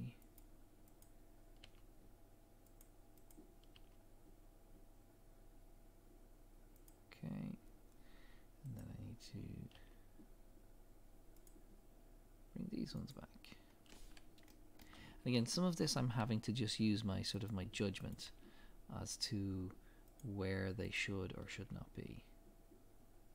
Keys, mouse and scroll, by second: 1.0 click, 1.6 g, 3.3 click, 3.8 g, 8.8 click, 9.7 g, 13.1 click, 13.7-14.1 scroll up 1, 14.5 shift+middle click, 14.9 scroll up 1, 16.2 g, 18.1 click, 18.2 g, 20.9 click, 21.5 g.